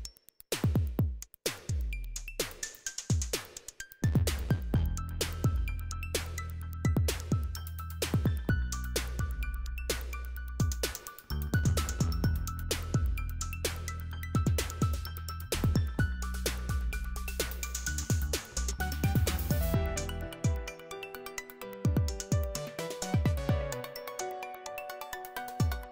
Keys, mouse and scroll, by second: 0.0-2.3 typing, 2.8 click, 4.1 click, 5.4 click, 7.9-8.3 scroll down 2, 8.3-9.0 scroll up 2, 9.0-10.6 scroll up 1, 11.3 click, 14.2-16.1 typing, 18.4 click, 20.4 click, 22.3 click, 24.4 click, 25.6 click.